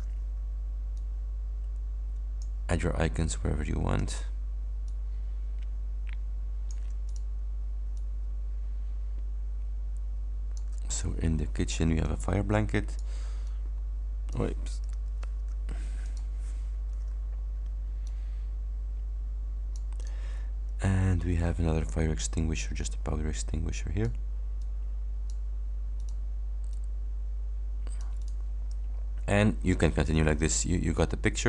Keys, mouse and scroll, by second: 0.3 ctrl+d, 1.0-2.7 ctrl+drag, 4.0 ctrl+d, 4.9-7.0 ctrl+drag, 7.1 ctrl+click, 8.0-10.8 ctrl+drag, 11.0 ctrl+click, 12.1 click, 13.5 click, 15.3 ctrl+y, 16.2 click, 16.7 scroll up 2, 17.6 ctrl+scroll up 2, 18.2-20.4 ctrl+drag, 22.6-24.4 drag, 24.7 click, 26.1 click, 26.8-28.6 drag, 29.0 ctrl+scroll down 2.